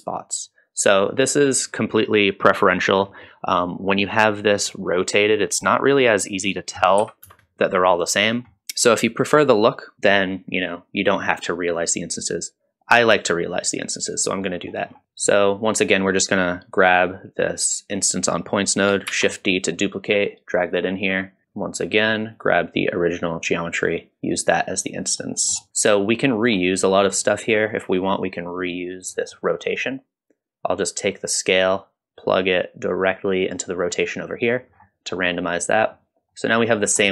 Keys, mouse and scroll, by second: 0.4 click, 3.6 middle click, 4.7 middle click, 5.5 middle click, 6.4-7.7 drag, 8.2-8.5 scroll down 1, 8.5 middle click, 9.4 middle click, 13.5 click, 14.4 middle click, 14.9 scroll down 1, 15.0 click, 15.0 scroll up 1, 15.2 middle click, 16.7 click, 19.4 shift+d, 20.7 click, 21.4 middle click, 21.4-22.0 scroll down 2, 22.3-24.6 drag, 25.2-25.6 middle drag, 26.0 scroll up 2, 26.1 middle click, 26.8 scroll down 1, 27.1 middle click, 29.1 middle click, 29.6 middle click, 31.2-34.0 drag, 34.7 scroll down 1, 35.2-35.8 middle drag, 36.3 middle click, 36.7 scroll up 1, 37.0 middle click.